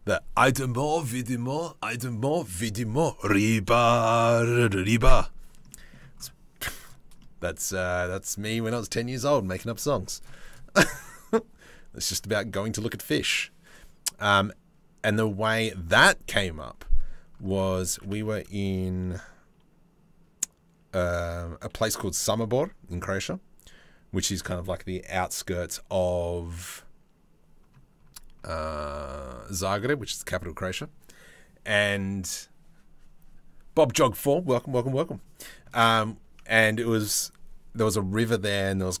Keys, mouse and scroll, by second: 5.3 middle click, 6.8 middle click, 7.6 middle click, 9.8 click, 10.1-14.9 drag, 17.5 Tab, 17.7 a, 28.3 Tab, 29.2 Tab, 35.4 Tab, 35.6 click.